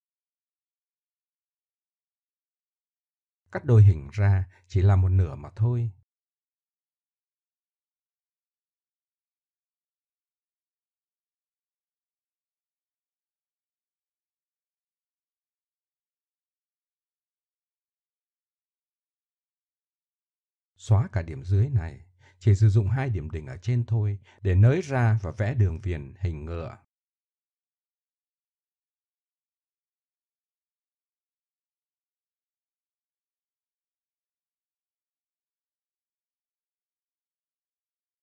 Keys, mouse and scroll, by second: 0.5 s, 1.9-2.5 drag, 5.1 Tab, 5.9 ctrl+r, 7.4 click, 7.6 Delete, 8.1 click, 9.2 middle drag, 12.3 KP_3, 13.0 click, 13.5 Tab, 14.1-15.3 middle drag, 15.3 KP_7, 15.9 middle click, 20.1 Tab, 20.8-21.7 drag, 22.9 middle click, 24.1-24.4 drag, 24.9-25.4 middle drag, 25.5-26.5 middle drag, 26.9-27.8 middle drag, 28.4 Delete, 29.8-30.2 drag, 30.3 g, 31.1 click, 31.5 middle click, 31.9 drag, 32.2-32.8 drag, 32.8 right click, 33.0 click, 33.5 g, 35.3 click, 36.2 click, 36.5 click, 37.0 click, 38.1 click.